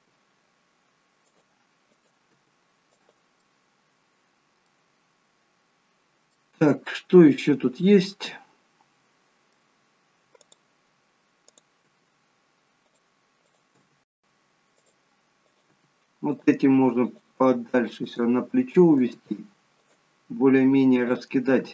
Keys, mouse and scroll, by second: 0.1 g, 2.0 click, 2.5 g, 3.4 middle click, 6.6 middle click, 10.4 click, 11.7 click, 12.0 g, 13.5 click, 13.8 g, 15.3 click, 15.7 g, 17.0 click, 17.4 g, 18.8 click, 19.0 g, 21.0 click, 21.6 g.